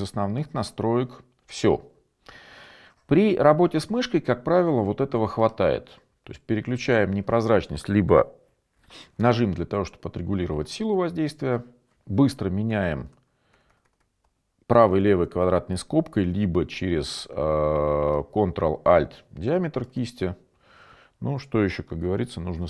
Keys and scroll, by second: 13.1-15.8 typing.